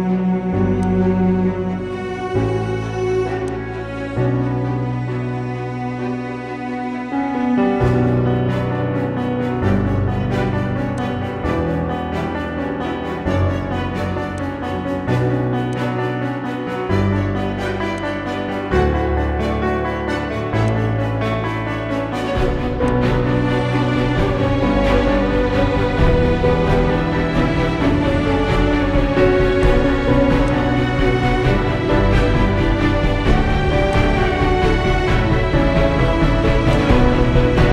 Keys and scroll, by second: 6.4 ctrl+z, 17.2 ctrl+z, 19.4 ctrl+z.